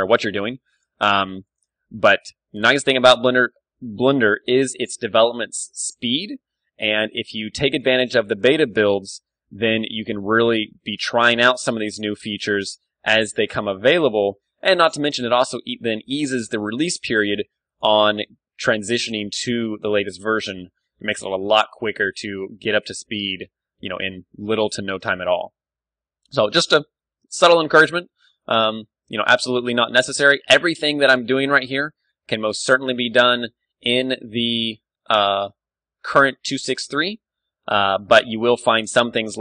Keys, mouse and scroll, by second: 0.6-3.4 right drag, 1.8 s, 4.2-6.0 drag, 4.7 a, 5.5 ctrl+r, 7.4 ctrl+r, 7.4-12.7 right drag, 8.3 ctrl+r, 9.4 ctrl+r, 11.3 s, 13.5 click, 13.5 Tab, 14.0 ctrl+w, 14.8 click, 15.0 middle click, 15.2 Tab, 16.1 ctrl+r, 16.7 middle click, 17.1-18.3 right drag, 17.4 ctrl+r, 18.3-20.5 drag, 19.1 s, 20.7 click, 20.9 Tab, 21.9 middle click, 23.3 KP_1, 23.9-27.2 middle drag, 25.7 Tab, 26.3 z, 26.6 z, 26.8 z, 27.2 ctrl+r, 27.9-29.9 right drag, 27.9 z, 28.2 ctrl+r, 28.9 s, 30.5 ctrl+r, 30.5 click, 31.6 s, 31.8 right click, 32.5 Tab, 33.0 click, 33.9 KP_1, 34.0 middle click, 35.5 Tab, 36.9 right click, 37.2-38.6 middle drag, 37.2 s.